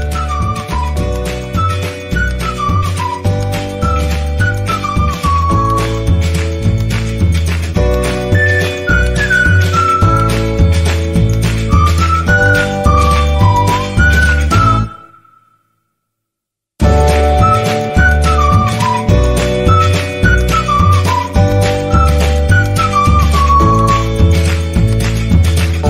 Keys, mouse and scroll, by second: 5.3 ctrl+-, 8.7-10.3 drag, 10.3 ctrl+=, 11.7-14.8 drag, 14.9-21.5 drag, 22.3-25.0 drag, 25.0 ctrl+-.